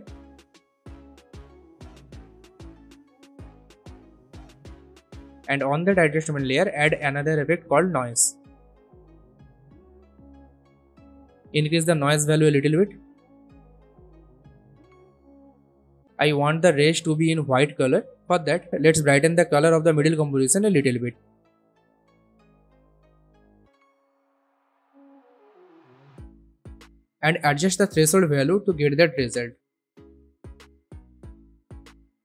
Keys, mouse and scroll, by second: 3.2 click, 7.0-8.4 typing, 9.4 click, 10.3-10.7 alt+scroll up 1, 11.0 space, 11.0-14.8 drag, 24.9 alt+scroll down 1, 25.8-26.8 drag, 27.9-29.2 drag, 29.7-31.9 drag.